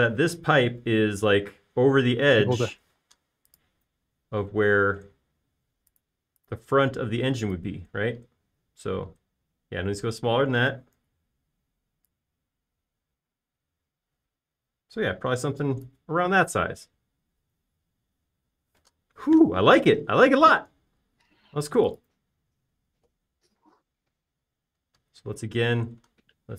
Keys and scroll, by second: 4.2 m, 12.4 s, 17.6 space, 19.8 m.